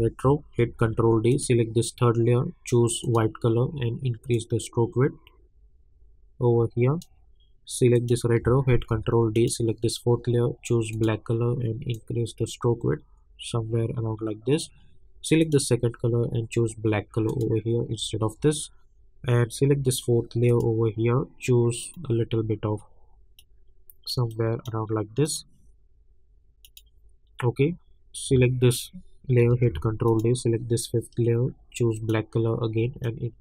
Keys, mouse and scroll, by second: 0.6 ctrl+d, 1.3-7.9 drag, 8.7 ctrl+d, 9.3-15.4 drag, 20.6-25.2 drag, 29.4 ctrl+d, 30.1-33.4 drag.